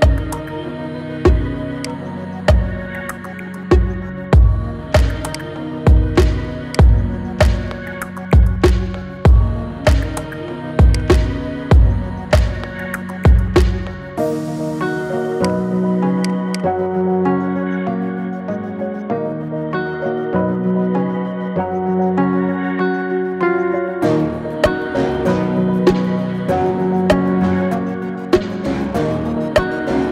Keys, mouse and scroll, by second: 0.5 s, 2.0-2.7 scroll down 9, 2.7-3.2 middle drag, 3.2-3.6 scroll up 5, 3.6-4.1 middle drag, 4.1 scroll down 3, 4.7-5.1 middle drag, 5.1 click, 5.6-6.6 middle drag, 6.6 click, 7.7 KP_1, 8.2-9.4 scroll up 8, 9.4 shift+a, 12.5 n, 13.7 n, 14.4 n, 15.2 click, 16.8 n, 18.4 KP_0, 19.1-20.1 scroll down 11, 20.1-22.4 shift+middle drag, 22.4 scroll down 1, 22.5-25.0 middle drag, 25.0-26.0 scroll down 1, 26.0-30.1 shift+middle drag.